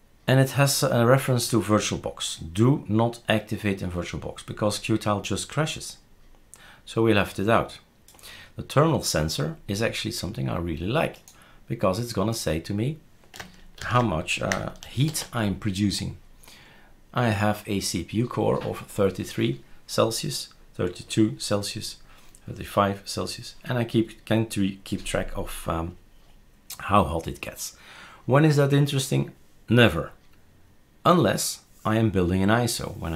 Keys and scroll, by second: 13.8 ctrl+s, 15.1 shift+super+r.